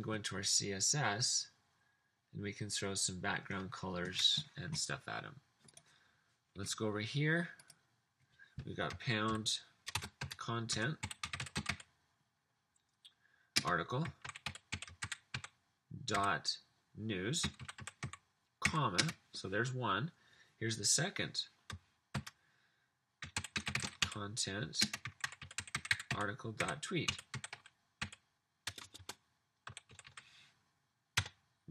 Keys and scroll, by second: 9.3-12.1 typing, 13.6-19.5 typing, 22.3-30.1 typing, 31.0 Return.